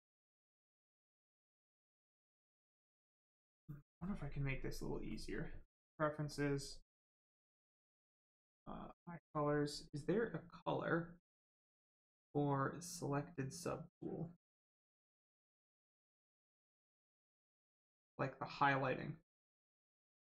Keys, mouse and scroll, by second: 1.8 click, 5.8 click, 9.8 click.